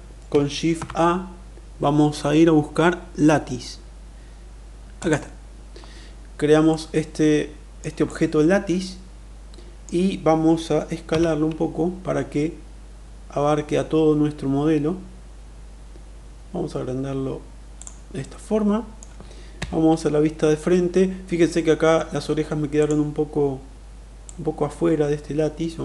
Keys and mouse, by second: 0.7 shift+a, 6.7-7.8 middle drag, 8.1-9.9 middle drag, 11.1 s, 17.7 click, 18.2-19.0 middle drag, 19.4 KP_1, 22.7 click, 24.1-25.8 drag.